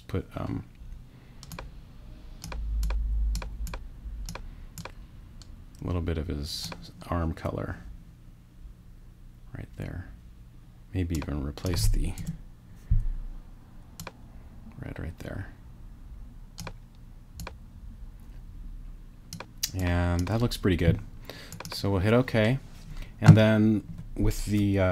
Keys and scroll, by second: 12.2 BackSpace.